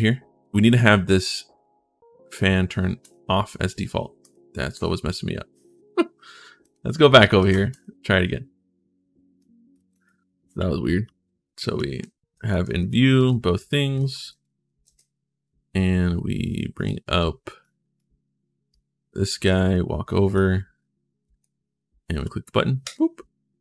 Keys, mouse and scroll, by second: 0.6 click, 2.8 click, 4.0 click, 4.5 click, 6.4 click, 7.1 ctrl+shift+s, 7.5 click, 9.1 click, 9.7 right click, 10.4-12.7 typing, 14.1 alt+Tab, 14.6 alt+shift+Tab, 16.6 click, 17.4 click, 19.7-21.2 typing, 20.8 click, 22.6 click.